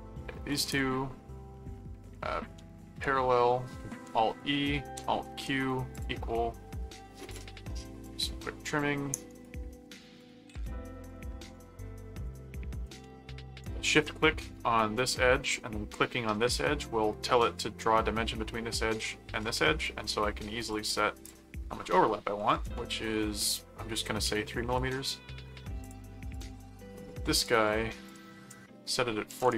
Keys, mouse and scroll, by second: 0.5 ctrl+click, 2.9 alt+r, 3.9 alt+e, 4.9 alt+q, 5.9 click, 7.3 click, 8.0 click, 8.8 click, 9.3 right click, 10.2 shift+click, 11.1 shift+click, 12.3 click, 20.7 click, 24.5 right click, 25.8 click, 27.3 click, 28.0 click.